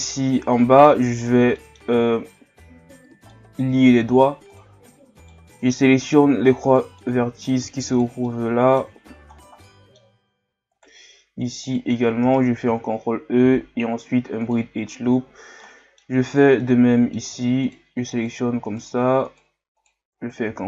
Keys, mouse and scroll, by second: 0.0-0.6 scroll down 1, 0.6-1.3 middle drag, 1.3 scroll down 1, 1.6 middle click, 1.9 scroll up 1, 2.7 Tab, 3.3-4.5 middle drag, 4.5 right click, 5.2 shift+right click, 5.6-6.7 middle drag, 6.7 shift+right click, 7.0 middle click, 7.9 shift+right click, 8.3 middle click, 9.0-9.6 scroll down 10, 9.6-10.7 middle drag, 10.7 shift+right click, 11.6 shift+right click, 12.7 ctrl+e, 15.1-15.6 scroll up 2, 15.6 middle click, 16.3 right click, 16.6-17.6 middle drag, 17.6 shift+right click, 18.1 shift+right click, 18.7 shift+right click, 19.3 shift+right click, 19.8 shift+right click, 20.5 ctrl+e.